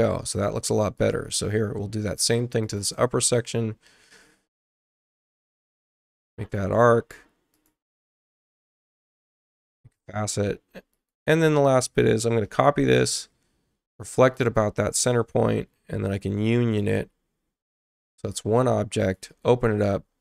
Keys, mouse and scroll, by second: 0.9 click, 2.6 click, 4.9-6.5 drag, 6.5-7.3 scroll up 1, 7.5 click, 9.2 Return, 10.9 click, 12.4 ctrl+alt+c, 14.3 click, 16.0 click, 16.7 click, 19.0 click.